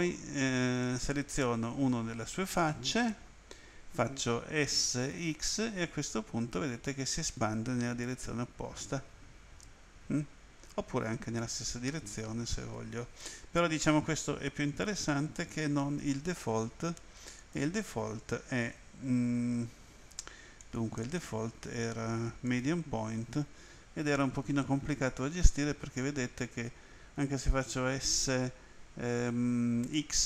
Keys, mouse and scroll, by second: 0.8 click, 4.5-5.6 typing, 15.3 click, 17.4 click, 20.6 click, 21.0 click, 22.5 click, 24.8 s, 30.1 x.